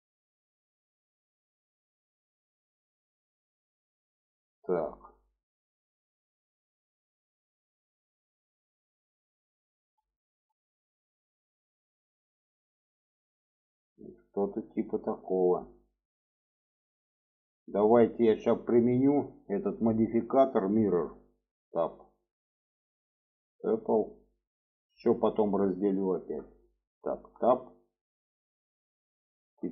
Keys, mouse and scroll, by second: 0.3 click, 0.9-2.6 ctrl+drag, 3.5 middle click, 4.4 middle click, 5.1-6.5 middle drag, 6.7-8.6 middle drag, 9.2 alt+middle click, 10.4 shift+middle click, 10.8-11.8 middle drag, 12.3 shift+middle click, 13.2-13.7 shift+middle drag, 14.3-14.7 shift+middle drag, 15.9 middle click, 16.8 middle click, 17.5 middle click, 17.9 shift+middle click, 19.0 middle click, 20.7 middle click, 21.4 Tab, 21.7 middle click, 23.0-23.9 drag, 24.3-26.4 middle drag, 27.0 Tab, 27.4 middle click, 28.1 click, 29.0 shift+middle click.